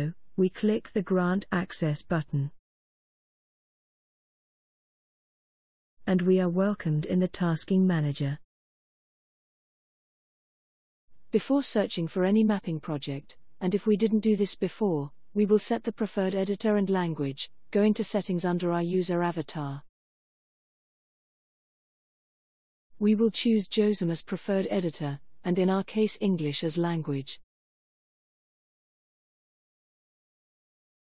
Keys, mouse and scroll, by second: 2.5 click, 19.4 click, 20.7 click, 23.6-24.0 scroll down 3, 25.6 click, 26.9-28.7 drag, 29.3 click.